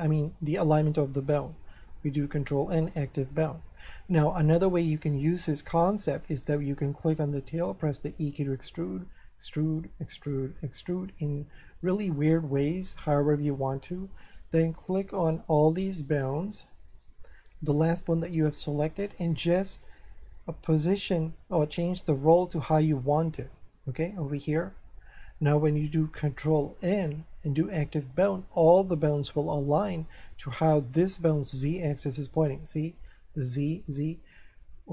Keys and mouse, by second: 1.8 ctrl+n, 2.8 click, 4.7 shift+middle click, 6.4 right click, 7.8 e, 8.5 click, 8.7 e, 10.8 click, 11.0 e, 11.9 click, 12.3 middle click, 14.3 right click, 14.8 shift+right click, 17.4 middle click, 19.8 click, 24.4 shift+middle click, 26.8 ctrl+n, 28.1 click, 30.3 middle click, 34.4 middle click.